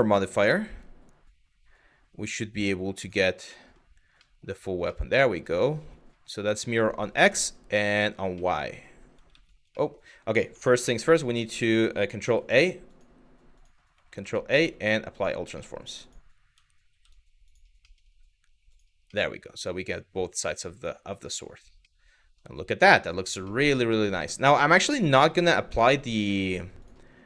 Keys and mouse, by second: 0.0-2.7 drag, 3.2 middle drag, 3.9-4.4 middle drag, 4.6-5.0 middle drag, 7.6 click, 8.0-8.5 middle drag, 8.9 ctrl+z, 9.4 middle click, 10.3 shift+a, 11.9 ctrl+s, 13.7 ctrl+a, 15.2 middle drag, 15.7 click, 16.5 ctrl+a, 18.3 click, 18.8-21.2 middle drag, 21.6-22.0 middle drag, 22.5 middle drag, 23.1-23.6 middle drag, 24.2-24.5 middle drag, 24.9 middle drag, 25.4-25.7 shift+middle drag, 26.0 middle drag, 26.4 click, 27.1 middle drag.